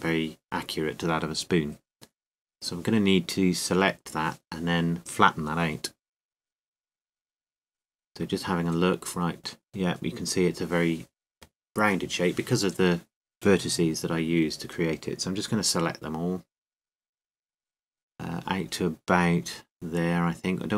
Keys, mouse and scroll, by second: 3.2 KP_7, 8.8 z, 10.3-12.0 middle drag, 15.3-17.2 middle drag, 15.5 c.